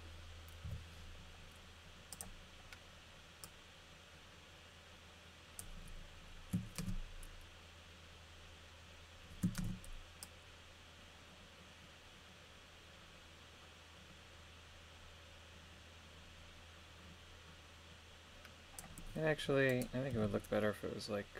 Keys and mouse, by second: 0.6 i, 3.4-5.6 drag, 6.8 shift+space, 9.6 shift+space, 10.2 click, 20.1 g.